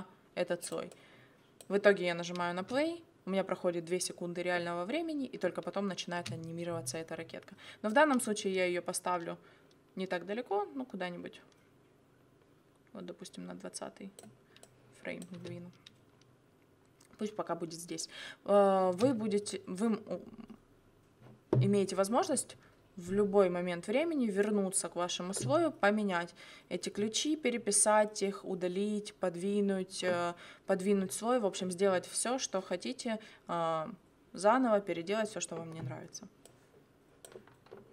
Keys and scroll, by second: 2.5 space, 6.1 space, 15.3 space, 18.8 space.